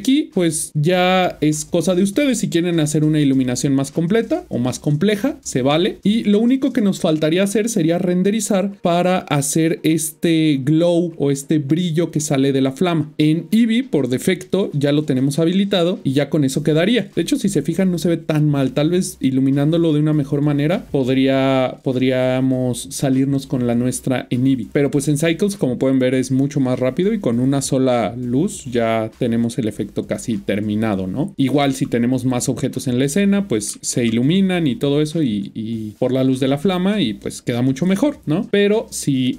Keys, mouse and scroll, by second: 6.1 click, 14.5 click, 25.9 click.